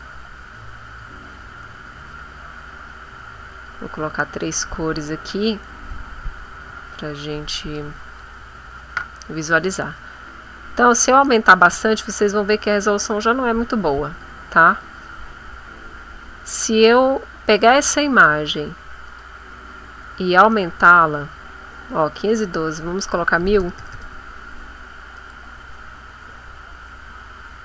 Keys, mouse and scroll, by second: 0.3 shift+click, 2.7 click, 3.7 shift+click, 5.4 click, 6.6-7.8 drag, 10.4-11.9 scroll up 6, 13.1 scroll up 2, 14.8-16.1 scroll down 4, 17.7 click, 19.0 click, 20.8 click, 22.2 click, 23.4 KP_1, 23.6 KP_0, 25.2 click, 27.1-27.6 scroll up 2.